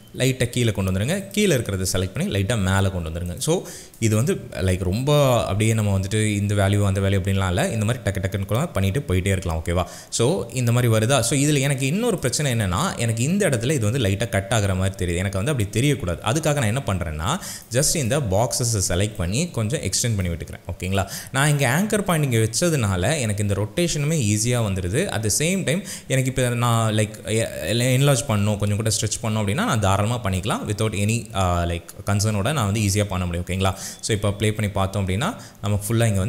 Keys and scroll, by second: 0.2 Down, 2.3 Up, 17.1 space, 34.3 space.